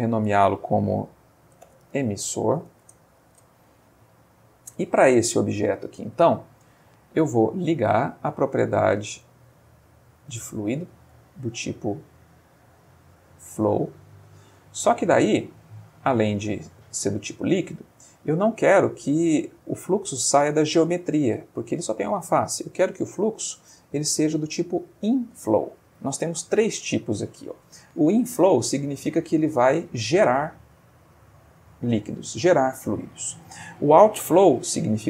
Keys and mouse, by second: 1.6-2.6 typing, 2.8 shift+Return, 4.2-5.1 middle drag, 5.2-6.3 ctrl+middle drag, 6.5 ctrl+shift+middle click, 8.0 click, 9.2 click, 10.3 click, 11.1 click, 13.5 click, 15.7 click, 17.2 click, 23.2 click.